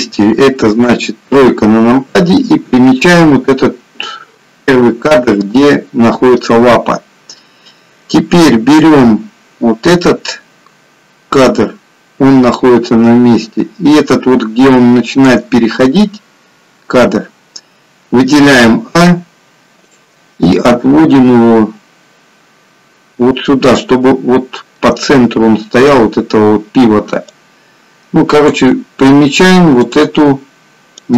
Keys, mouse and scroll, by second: 0.9 KP_3, 8.8 click, 18.5 a, 19.9 click, 21.1 click, 27.2 click.